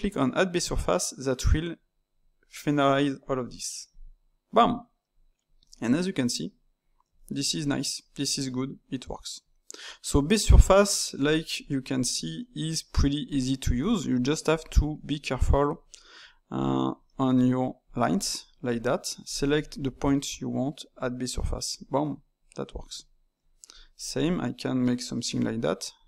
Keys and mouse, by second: 3.8-5.6 drag, 5.6-12.6 ctrl+middle drag, 12.6-18.0 typing, 13.2 click, 13.9 middle click, 14.4 click, 15.0 middle click, 15.9 middle click, 16.5 click, 17.0 middle click, 17.8 click, 18.2-19.2 middle drag, 19.2 click, 19.5 shift+click, 19.7 shift+click, 20.9-21.7 drag, 21.7-23.6 middle drag, 23.6 click, 23.9-25.3 shift+middle drag, 25.3-26.0 typing, 25.9 click.